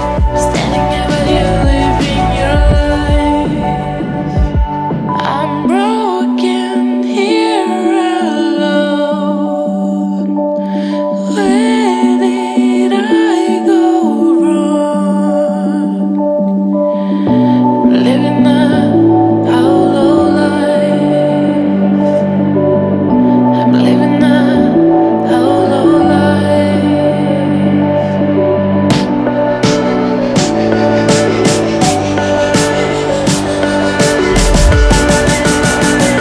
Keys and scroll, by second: 22.4 ctrl+t, 28.0 ctrl+t.